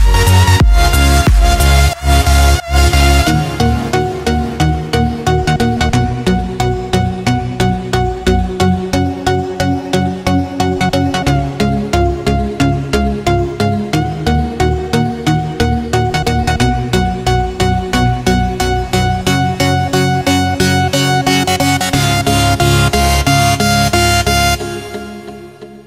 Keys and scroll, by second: 1.2 alt+shift+super+d, 15.5 super+d, 15.8 super+d, 17.1-19.2 typing, 22.3-22.8 typing, 22.9 super+space, 23.0 super+space, 23.1 super+space, 23.6-24.2 super+space.